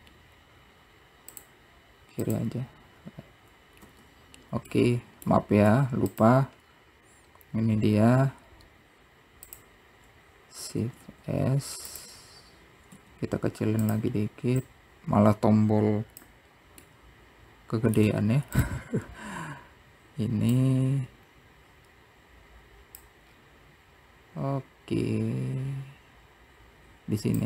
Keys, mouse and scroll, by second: 1.6 n, 2.4 middle click, 5.8 scroll up 1, 7.2 click, 8.6 s, 9.6-10.7 drag, 10.7 s, 12.4 click, 13.0-14.6 drag, 14.6-15.8 middle drag, 16.9-18.3 scroll down 1, 18.3-20.8 drag, 21.0-24.1 scroll down 3, 25.2 click.